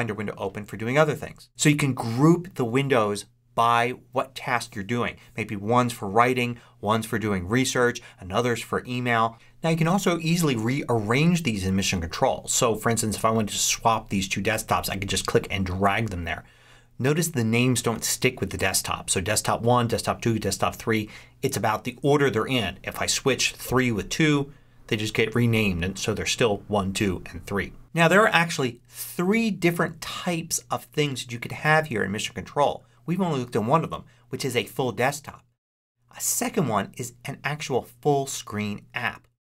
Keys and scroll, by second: 28.8 ctrl+Up.